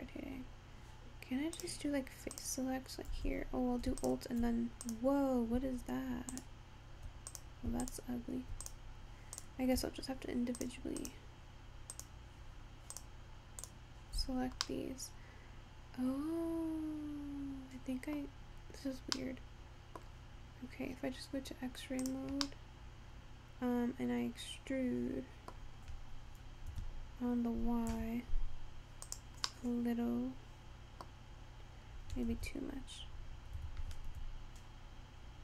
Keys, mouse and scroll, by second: 1.6 click, 2.4 click, 4.0 alt+click, 4.9 click, 6.4 alt+click, 7.4 click, 7.9 alt+click, 8.7 click, 9.4 click, 10.6 shift+click, 11.0 shift+click, 12.0 shift+click, 13.0 shift+click, 13.6 shift+click, 14.7-17.8 middle drag, 19.4 middle click, 20.3-21.0 scroll down 1, 21.0-22.3 scroll down 7, 22.3 click, 22.6-25.6 middle drag, 26.8 e, 29.6-31.7 middle drag, 31.7-32.4 scroll down 1, 32.4 ctrl+z, 33.7 e.